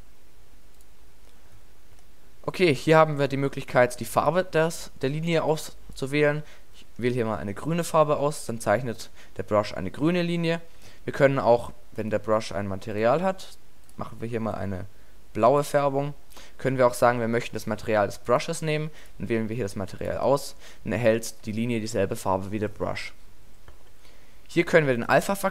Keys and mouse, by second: 0.8-2.7 drag, 2.7-4.2 middle drag, 4.2-6.1 drag, 6.8-8.3 middle drag, 21.0 middle click, 24.3-25.0 middle drag, 25.0-25.5 drag.